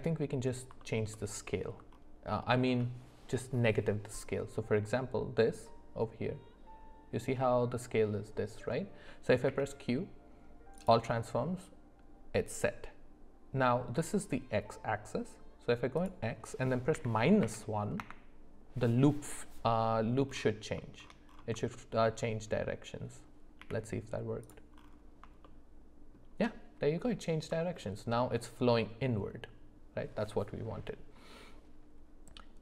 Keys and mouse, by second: 1.1 alt+middle click, 1.5 alt+middle click, 2.4 shift+middle drag, 9.5 q, 16.0-18.0 drag, 21.7 shift+middle click, 23.6 g, 25.4 shift+middle click, 27.6 shift+middle click.